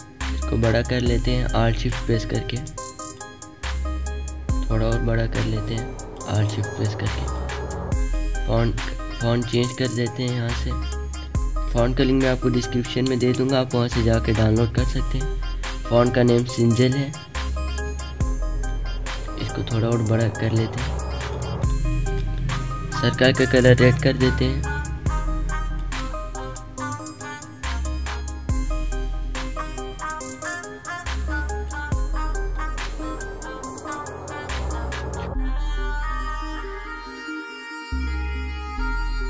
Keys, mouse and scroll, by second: 2.9-5.2 drag, 5.2-7.6 alt+shift+drag, 18.9-20.7 drag, 20.7 alt+shift+click, 31.3 scroll up 2, 31.7 alt+shift+click, 32.5 Down, 32.9-34.2 alt+shift+drag, 34.2 Up, 35.5 alt+shift+click, 36.3 Down, 37.1 alt+scroll up 1, 37.4 click, 37.8 ctrl+z, 38.0 alt+scroll down 1, 38.4 alt+scroll up 1, 38.9 alt+scroll down 1, 39.2 space.